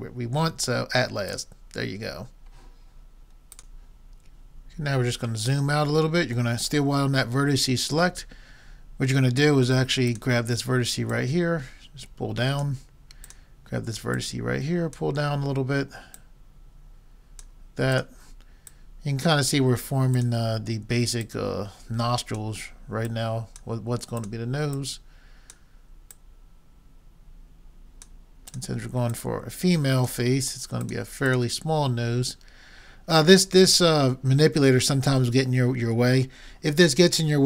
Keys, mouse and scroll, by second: 4.9-8.8 middle drag, 10.1-12.8 drag, 13.2-15.9 drag, 16.2 click, 16.7-17.8 right drag, 17.8-23.0 drag, 23.1-27.7 drag, 28.5-32.6 drag.